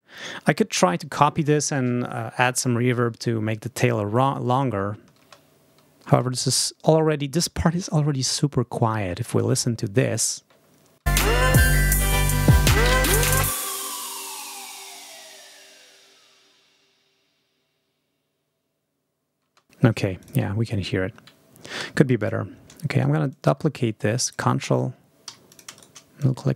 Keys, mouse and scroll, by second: 0.0 space, 4.3 click, 4.8 ctrl+scroll up 2, 5.1 ctrl+space, 5.7 ctrl+scroll down 2, 6.0 ctrl+space, 6.3 ctrl+click, 6.7 ctrl+space, 6.7 click, 9.2 click, 11.0 space, 14.2 ctrl+scroll up 2, 19.4 space, 20.1 ctrl+click, 20.5 ctrl+scroll up 2, 20.9 ctrl+scroll down 2, 21.7 g, 22.1 click, 23.2-24.4 ctrl+drag, 25.1 ctrl+s, 25.4 shift+click, 25.6 shift+right click, 26.1-26.5 shift+drag.